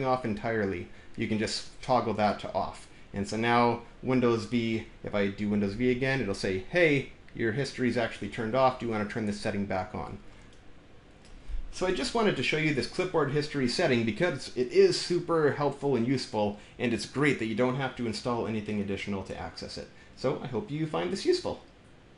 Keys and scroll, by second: 5.5 super+v.